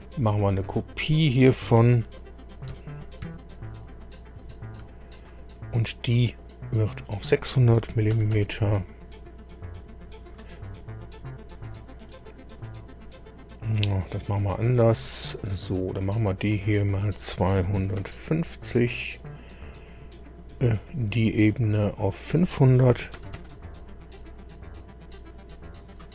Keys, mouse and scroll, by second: 3.2 ctrl+c, 4.4 ctrl+v, 5.1 ctrl+click, 6.9 click, 7.9 KP_6, 8.1 KP_0, 8.3 KP_0, 12.0-14.2 middle drag, 15.2 click, 16.6 click, 17.6 KP_2, 17.8 KP_5, 18.0 KP_0, 20.8 click, 21.9 click, 22.9 KP_5, 23.2 KP_0, 23.4 KP_0.